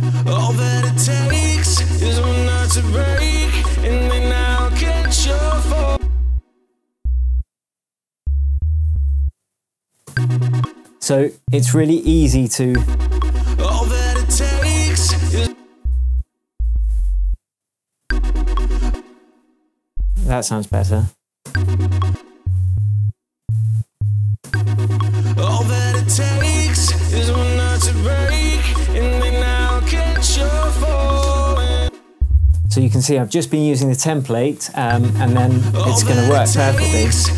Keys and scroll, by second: 0.2 space, 1.2 super+d, 5.8 space, 10.0 alt+space, 11.9 shift+Down, 12.6 shift+space, 13.2 space, 15.3 space, 16.5 Down, 18.0 space, 19.6 shift+space, 19.8 shift+Down, 20.6 shift+Up, 21.4 shift+space, 22.0 space, 22.7 Up, 23.9 Down, 24.4 space, 31.8 space, 33.3 super+d, 34.8 space.